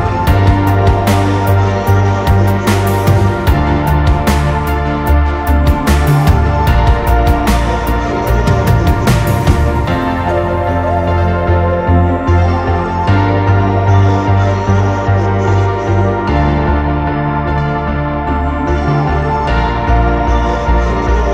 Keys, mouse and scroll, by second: 1.5-2.4 alt+scroll up 1, 13.5 ctrl+click, 17.0 right click.